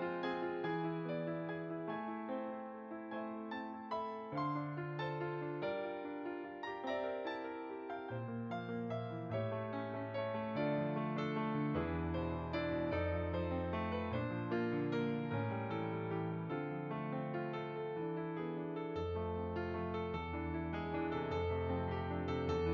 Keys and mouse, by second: 0.2 click, 1.9 middle click, 3.0 click, 8.8 middle click, 11.3 click, 16.3 shift+click, 17.2 click, 20.3 ctrl+a, 20.6 click, 22.4 ctrl+j.